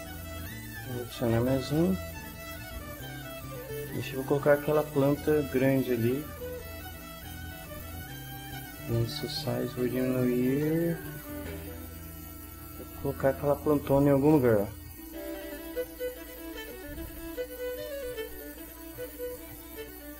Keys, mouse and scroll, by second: 0.6 click, 1.8 click, 3.5 click, 4.7 click, 5.9 click, 8.7-11.2 drag, 14.6 right click, 15.5 right click, 17.0 right click, 18.3 right click, 19.3 right click.